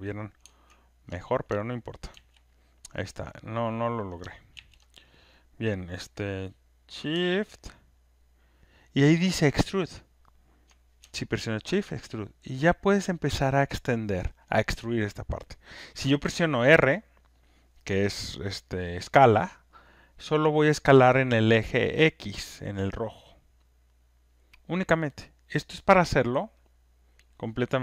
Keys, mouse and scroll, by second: 2.1 ctrl+F1, 3.0 ctrl+click, 4.5 ctrl+F1, 14.6 shift+click, 26.5-27.8 drag.